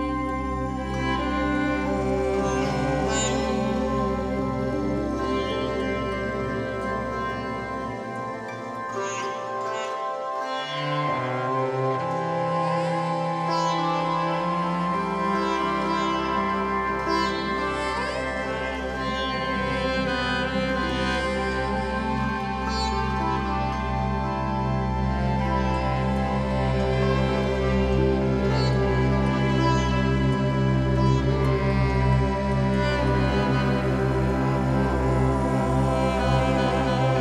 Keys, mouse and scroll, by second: 1.3-4.5 drag, 13.2-19.9 drag, 19.9-21.3 middle drag, 22.4-27.1 drag, 27.8 a, 30.6-37.2 drag.